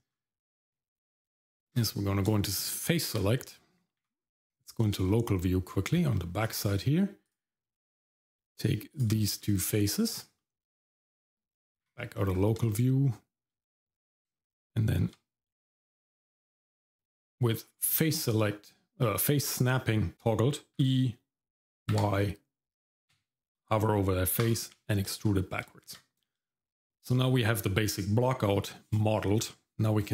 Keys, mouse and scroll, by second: 0.1-0.8 scroll up 1, 1.0 Tab, 2.3 shift+middle click, 3.2-4.0 scroll down 2, 4.0 KP_Divide, 5.1 shift+middle click, 6.1 middle click, 6.4-7.0 scroll up 2, 7.2 click, 7.6 middle click, 8.9 shift+click, 9.4 shift+middle click, 10.4 middle click, 10.9 middle click, 12.7 shift+middle click, 13.8 scroll up 2, 14.3 shift+middle click, 14.6 shift+middle click, 16.9-18.1 drag, 20.7 g, 20.7 e, 25.1 shift+middle click, 25.8 Tab, 26.1 scroll down 2, 26.5 shift+middle click.